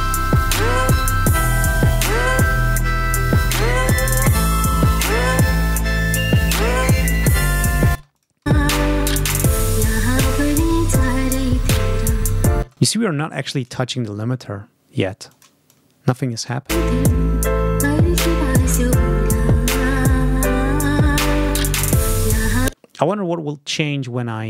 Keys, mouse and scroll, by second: 6.8 ctrl+scroll down 2, 8.0 ctrl+space, 8.0 ctrl+click, 12.5 space, 15.2 click, 15.6 click, 15.8-16.6 scroll up 1, 16.6 space, 19.8-20.2 ctrl+scroll up 2, 22.6 space, 23.4 scroll down 2, 24.2 click.